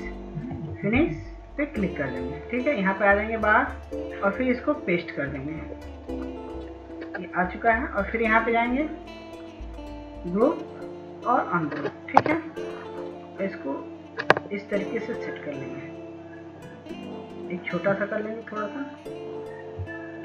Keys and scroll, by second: 0.6 ctrl+s, 1.0 ctrl+s.